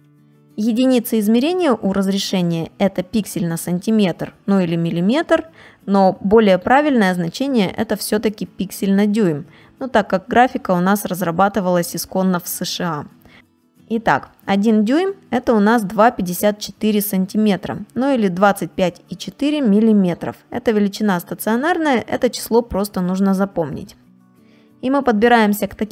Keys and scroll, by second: 1.2 space, 14.0 space, 23.6 space, 25.5 space.